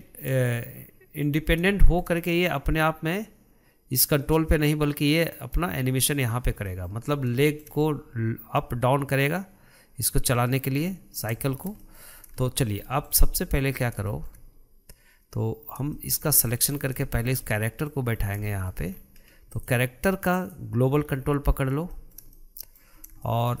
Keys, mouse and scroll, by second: 0.0-0.4 scroll up 2, 0.4-1.8 shift+middle drag, 1.8-2.2 scroll down 2, 2.2-5.6 shift+middle drag, 7.0-7.5 middle drag, 7.5-7.8 scroll up 2, 7.8-10.9 shift+middle drag, 10.9-11.2 scroll down 3, 11.2-12.5 middle drag, 12.5 scroll up 2, 12.8-14.2 shift+middle drag, 14.2-14.5 scroll up 2, 14.5-16.1 shift+middle drag, 16.1 scroll down 2, 16.3-17.1 shift+middle drag, 17.1-17.4 scroll up 3, 17.4-18.5 shift+middle drag, 18.5-18.8 scroll up 2, 18.8-19.3 shift+middle drag, 19.3-19.9 scroll up 5, 19.9 click, 20.7 click, 21.3-22.3 scroll down 11, 22.3-23.3 shift+middle drag, 23.3-23.6 scroll down 1.